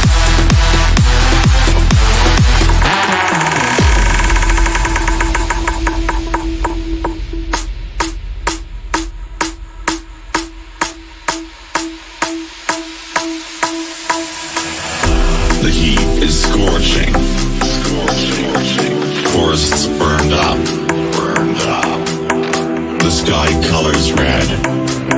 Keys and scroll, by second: 3.3 shift+Page_Up, 3.8 shift+F2, 4.1 Escape, 12.8 shift+F2, 12.9 F3, 13.2 Escape, 17.6 F3, 22.5 F3, 22.7 Escape, 23.3 shift+F2, 23.6 Escape.